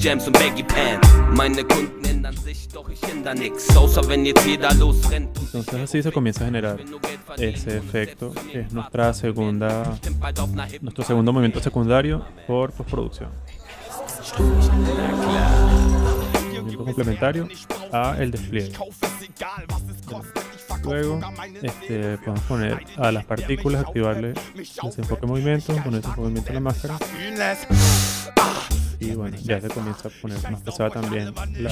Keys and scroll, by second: 2.2 0, 7.5 0, 9.8 space, 10.0 z, 11.5 0, 12.8 0, 19.5 v, 31.6 0.